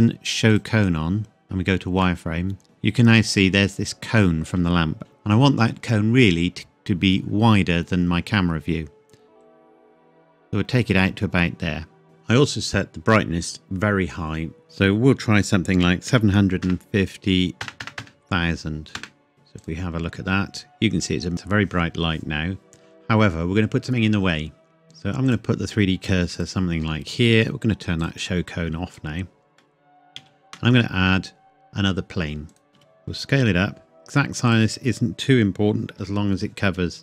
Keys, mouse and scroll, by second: 0.5 click, 2.0 middle click, 5.0-5.9 scroll up 1, 9.4 click, 14.6 click, 15.8 KP_7, 16.1 KP_5, 16.6 KP_0, 19.0 KP_Enter, 19.6 click, 21.1 scroll up 1, 24.8-25.3 scroll down 1, 25.3 click, 29.6 scroll down 1, 30.2 shift+a, 32.5 click, 32.8 s, 34.5 click, 36.0 KP_7, 36.8-37.0 scroll down 1.